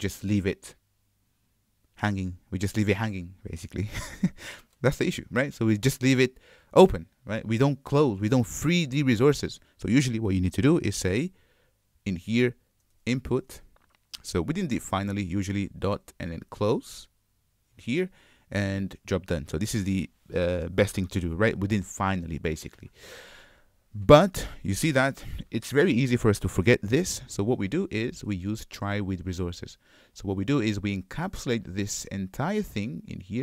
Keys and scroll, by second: 15.4 Return.